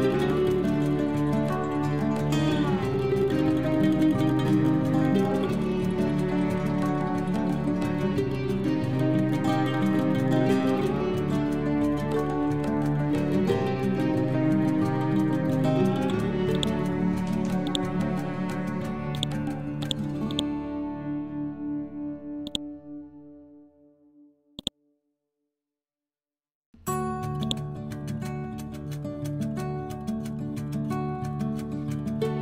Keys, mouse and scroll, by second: 0.0-3.2 typing, 4.5 Down, 4.8 shift+Left, 5.8 shift+Left, 6.9-10.8 typing, 11.9 Left, 12.7 shift+Left, 13.3 n, 14.4 scroll down 1, 16.4 click, 18.6 ctrl+z, 19.0 click, 20.2 right click, 20.6 scroll up 1, 22.3-24.5 drag, 27.3 click, 28.4 End, 28.8 ctrl+shift+Left, 30.6-32.4 typing.